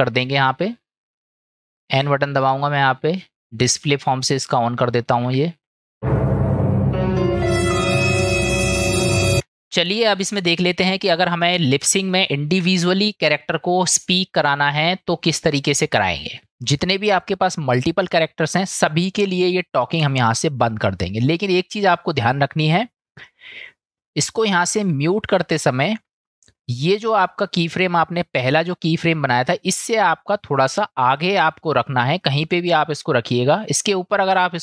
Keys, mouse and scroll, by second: 3.8 click, 10.0-11.9 middle drag, 12.2-12.6 shift+middle drag, 13.4-15.2 middle drag, 16.0-16.5 middle drag, 22.6 click, 28.8-30.1 drag, 31.5-33.7 drag, 34.3 click.